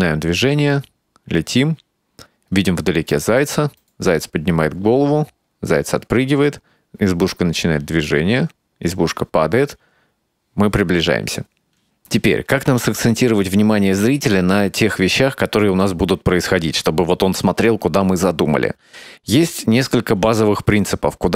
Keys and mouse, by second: 1.1 s.